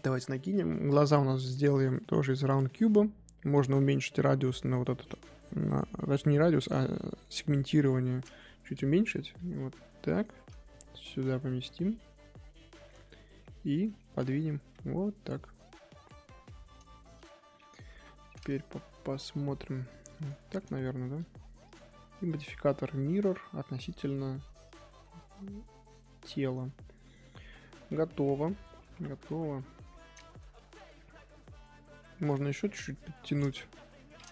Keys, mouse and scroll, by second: 5.1-6.9 drag, 6.9 middle click, 7.7 KP_1, 8.1-8.5 scroll up 1, 8.5 Tab, 12.3-12.7 scroll down 1, 12.7-13.4 shift+middle drag, 13.4 scroll down 1, 13.6-14.0 shift+middle drag, 14.0 scroll up 1, 14.5 g, 16.2 scroll down 1, 16.3-17.9 middle drag, 17.9 KP_1, 18.7 shift+middle drag, 19.0-19.4 scroll up 1, 19.4 g, 20.4-20.8 scroll down 1, 24.0 click, 25.0 scroll down 1, 25.2 click, 25.5-28.9 middle drag, 28.9-29.4 scroll up 1, 29.4 KP_3, 29.9 click, 30.1-31.0 scroll down 2, 31.0 middle click, 31.9 1, 32.2 click, 32.5-33.8 middle drag, 33.8 KP_7.